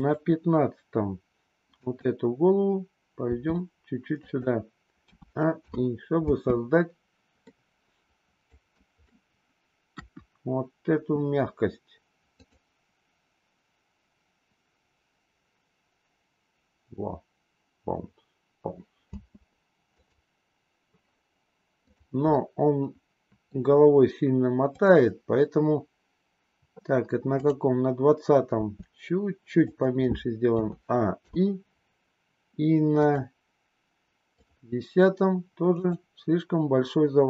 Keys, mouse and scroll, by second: 0.1 click, 1.7 click, 3.3 r, 4.9 a, 5.7 i, 6.3 space, 7.5-8.3 middle drag, 8.8 middle click, 9.9 KP_1, 19.0 space, 19.8 click, 21.8 click, 22.3-23.7 middle drag, 24.7 click, 27.4 click, 28.5 r, 30.4 a, 31.2 i, 33.0 click, 34.4 click, 35.7-36.3 drag.